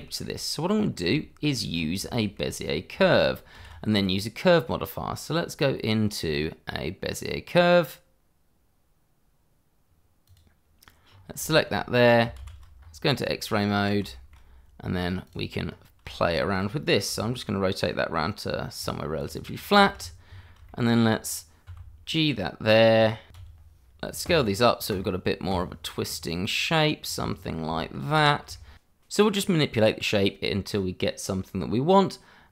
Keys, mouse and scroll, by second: 0.0 shift+middle click, 0.8 scroll up 1, 1.2 shift+middle click, 1.7-2.1 scroll up 1, 2.1 shift+middle click, 2.6-3.1 scroll up 1, 3.5 shift+a, 10.2 click, 11.1 scroll up 1, 11.4 shift+middle click, 12.8 shift+z, 12.8-13.4 scroll up 1, 13.4 Tab, 14.1 shift+middle click, 15.2 click, 15.6-16.0 scroll up 1, 16.1 shift+middle click, 17.0 r, 18.7 click, 19.3 double click, 19.5-20.0 scroll down 1, 20.6 shift+middle click, 21.6 g, 23.0 click, 23.4 s, 24.7 scroll up 1, 25.2 middle click, 25.3 click, 25.4 middle click, 25.5-26.0 scroll up 1, 26.2 click, 26.5 s, 27.9 click, 28.1 scroll down 1, 28.3 shift+middle click, 28.5 click, 28.6 shift+middle click, 28.9-31.9 typing, 29.1 click, 29.2 scroll down 1, 29.5 click, 29.8 click, 29.9 shift+middle click, 30.2 click, 30.3 middle click, 30.4 scroll up 1, 30.6 click, 30.9 shift+middle click, 31.0 click, 31.2 scroll up 1, 31.5 click, 31.8 click, 31.9 click, 32.0 scroll down 1, 32.1 Tab, 32.2-32.5 scroll up 1.